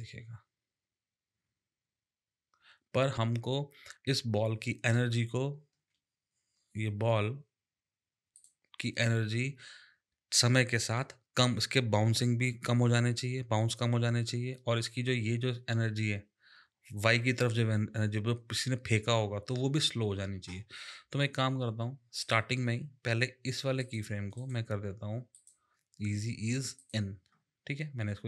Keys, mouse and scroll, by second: 5.7 space, 8.4 click, 22.2 click, 23.8 click, 24.3 right click, 25.3 click, 26.7 click.